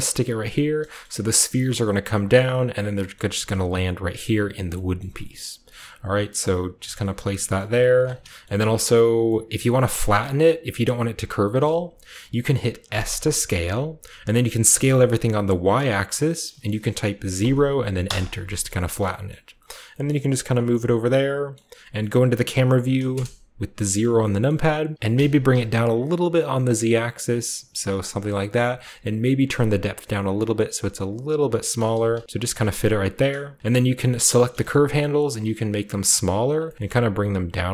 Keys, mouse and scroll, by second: 0.0 typing, 3.1 middle click, 3.1-4.7 scroll up 1, 5.0 middle click, 5.1 scroll down 1, 5.2-5.9 scroll up 1, 5.3 middle click, 5.9-6.3 typing, 6.7 click, 7.6 typing, 7.9 click, 8.2-9.2 shift+drag, 8.2 shift+middle click, 8.4 shift+middle click, 9.6 middle click, 10.0-11.4 scroll down 1, 10.4-11.4 middle drag, 11.4-12.9 scroll down 1, 11.6-12.9 middle drag, 12.9 typing, 14.6 typing, 17.3 typing, 18.0 Return, 18.6 middle click, 19.2-20.9 shift+scroll up 1, 19.3 shift+middle click, 19.8 g, 20.0 shift+middle click, 20.4-21.5 shift+drag, 21.5-23.1 middle drag, 23.1 KP_0, 24.4 shift+middle click, 24.4-24.9 shift+scroll up 1, 24.9-26.0 right drag, 25.1 g, 25.5 z, 27.9 click, 29.4-31.6 shift+drag, 31.9 g, 32.1 z, 32.3 click, 32.5 scroll down 3, 32.6 shift+click, 34.4 right click, 35.1-37.7 typing, 35.9 click, 36.2-37.7 drag, 36.7-37.7 scroll up 1.